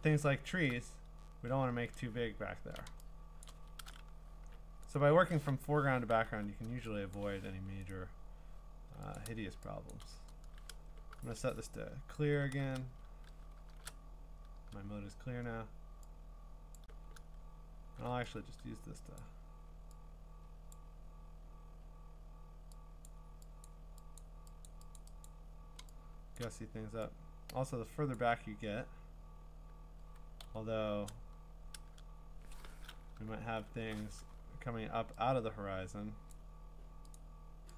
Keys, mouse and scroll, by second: 1.8 scroll down 1, 2.0-2.6 scroll down 9, 2.6 scroll, 3.5 click, 4.4 b, 5.0 right click, 5.6 Escape, 6.3 u, 7.2 click, 7.3 Escape, 7.3 click, 7.9 right click, 9.2 click, 9.9 click, 10.0 click, 12.1 alt+shift+c, 13.7 alt+shift+r, 16.8 click, 17.2 middle click, 17.3-18.0 scroll, 19.2 click, 20.7 click, 23.1 click, 23.6 click, 24.2 click, 24.6 click, 25.0 click, 25.3 click, 26.4 click, 28.1 click, 30.4 x, 33.4 alt+shift+n, 36.3 click, 37.1 click.